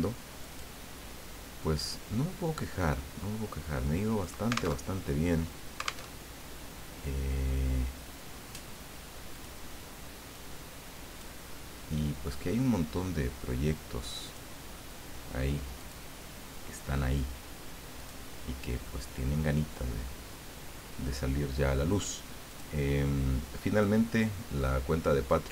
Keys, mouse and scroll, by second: 0.4 click, 1.8 click, 4.2 click, 4.8 alt+Tab, 6.1 alt+Tab, 9.3 click, 10.3-11.6 drag, 14.3 click, 15.8 click, 18.0 click, 18.8-20.7 middle drag, 22.5 click, 23.8-25.5 drag.